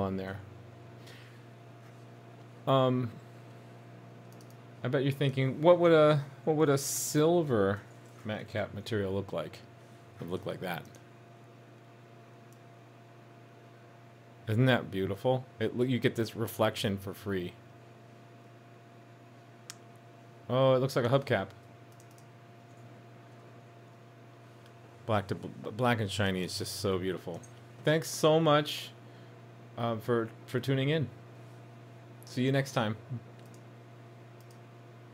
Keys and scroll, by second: 8.5 super+s, 22.8 super+z, 23.5 super+s.